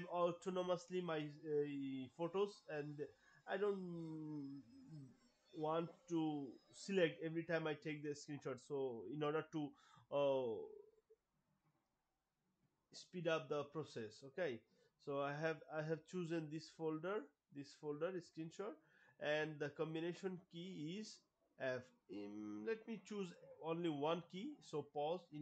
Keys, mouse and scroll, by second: 2.5 click, 17.0 click, 20.0 click, 22.3 click, 24.0 Pause.